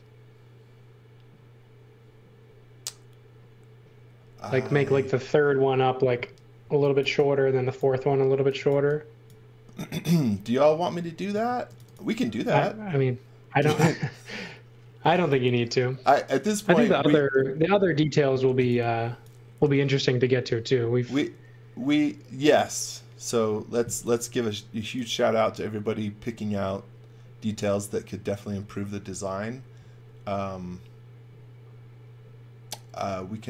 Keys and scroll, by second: 6.6-9.1 typing, 11.3 space, 15.0 x, 15.3 v, 16.5 x, 18.2-19.6 typing, 23.8 x, 24.0 v.